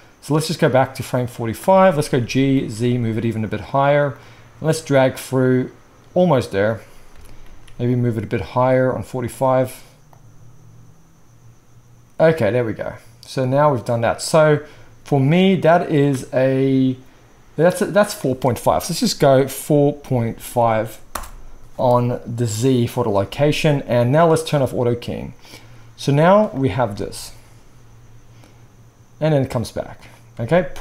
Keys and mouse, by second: 2.2 g, 3.5-4.2 middle drag, 4.2-9.4 drag, 7.2 g, 9.4-10.2 middle drag, 10.2-24.6 drag, 24.6-25.4 middle drag, 25.4-30.8 drag, 26.8 space, 30.4 alt+a.